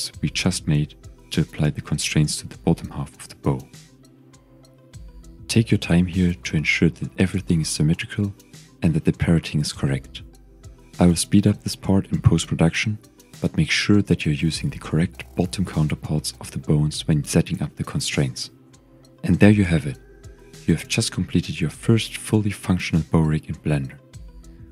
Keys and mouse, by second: 4.3 KP_1, 5.0-5.4 shift+drag, 7.2 click, 10.0-10.4 shift+drag, 10.3 typing, 10.8 click, 10.9 shift+click, 11.1 click, 12.0 click, 12.2 click, 12.4 click, 12.7 t, 13.1 click, 13.4 click, 13.6 click, 14.1 click, 14.5 click, 14.8-16.0 drag, 15.4 o, 15.7 t, 16.2 click, 16.5 click, 16.9 click, 17.1 click, 20.2 shift+drag, 21.6 g, 21.7 x.